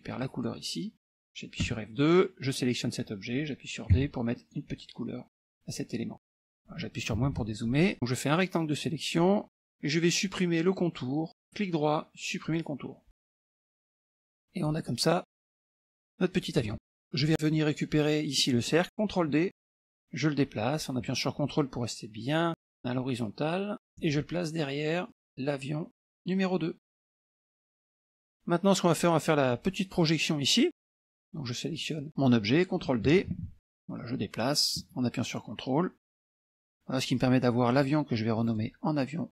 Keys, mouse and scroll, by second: 0.3 click, 1.7 F2, 2.5 click, 4.0 d, 4.4 click, 5.4 F1, 6.3-7.0 ctrl+scroll down 2, 7.2 KP_Subtract, 7.4 KP_Subtract, 7.9-9.5 drag, 11.4-12.5 right drag, 12.5 click, 13.4 click, 14.3 click, 15.1-16.6 drag, 16.8 ctrl+z, 17.2 click, 17.6-19.1 scroll down 3, 19.8 ctrl+d, 20.0-24.0 drag, 25.1-26.9 drag, 27.1 middle click, 27.9 middle click, 31.2 KP_Subtract, 32.0 click, 33.4 ctrl+d, 33.7-36.7 drag, 37.8 click, 38.5 click, 39.0 click.